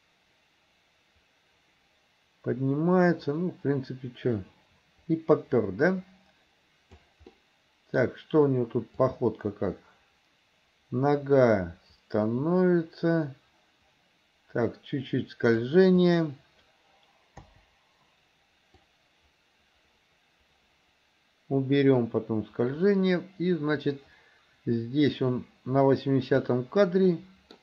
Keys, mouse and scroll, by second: 7.4-8.1 middle drag, 9.1-15.7 drag, 16.0 click, 17.5 Delete, 18.9-26.6 drag, 27.2 middle click, 27.5 middle click.